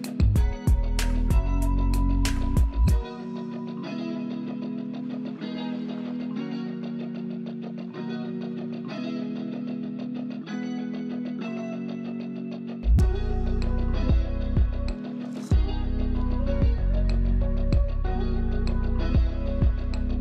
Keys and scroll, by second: 0.2 space, 2.0 Return, 3.5 BackSpace, 4.2 Return, 5.7-7.7 typing, 9.6-10.6 typing, 14.6 typing, 19.8-20.2 typing.